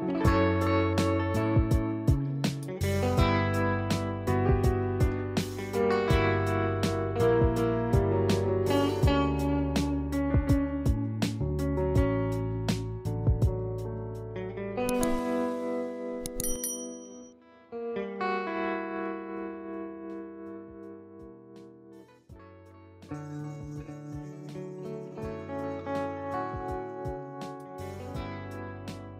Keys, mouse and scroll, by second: 0.0-4.0 typing, 2.2 click, 4.1 click, 5.1-5.6 typing, 6.8 click, 7.6 ctrl+click, 8.6 ], 9.9 click, 10.7 ctrl+z, 11.5 ctrl+shift+i, 12.5 click, 13.8-20.2 typing, 14.0 click, 14.9 click, 16.6 click, 19.1 click, 20.4 click, 22.0 typing, 22.5 click, 23.4-28.8 typing, 24.7 click, 25.3 click, 26.1 click, 26.6 click, 27.6 click, 28.5 ctrl+d, 29.0 click.